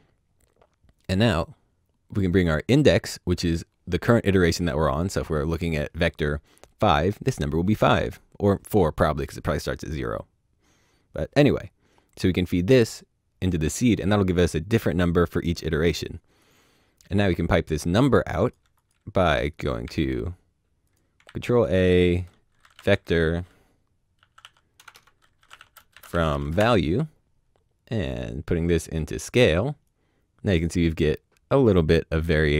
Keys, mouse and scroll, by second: 2.4 click, 16.4 click, 19.8 shift+a, 20.8 click, 21.2 ctrl+a, 22.3-26.3 typing, 26.3 Return, 26.8 click, 31.8 click.